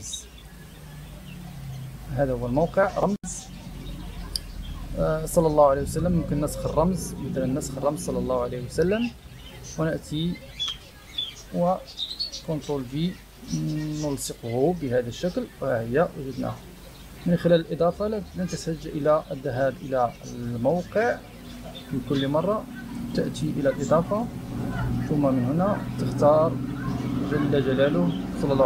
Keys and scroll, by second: 10.6 Return, 12.6 ctrl+v.